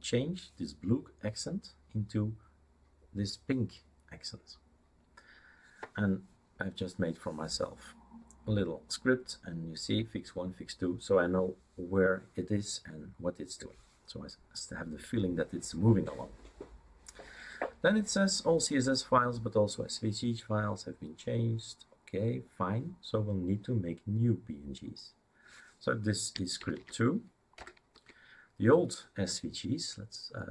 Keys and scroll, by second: 26.8-27.6 typing, 27.9 Tab.